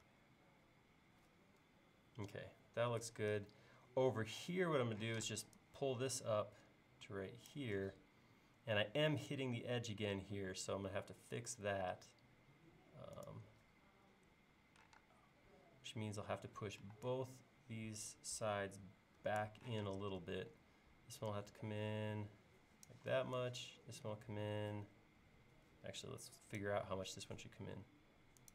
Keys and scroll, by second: 5.1 p, 12.5 l, 15.0 space, 16.9 e, 19.3 Escape, 19.8 p, 26.4 Escape, 26.9 l.